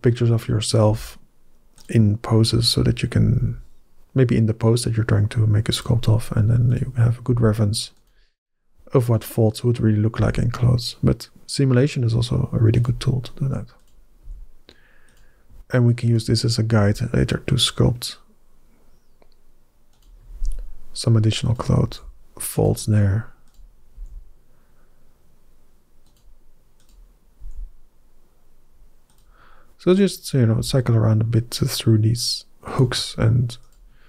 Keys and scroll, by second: 0.7 g, 3.2 g, 7.1 g, 10.0 g, 14.1 g, 16.6 g, 21.7 g, 21.7 g, 23.8 g, 27.2 g, 30.4 g.